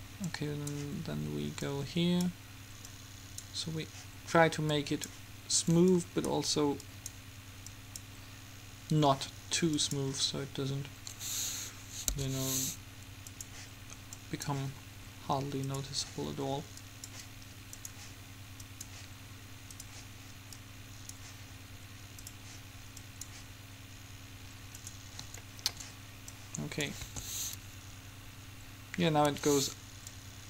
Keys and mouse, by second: 0.4-4.8 drag, 4.9-9.5 drag, 10.0-11.6 drag, 11.7 middle click, 12.3 n, 13.5-20.7 drag, 27.2 alt+a, 29.5 Escape, 30.3-30.4 drag.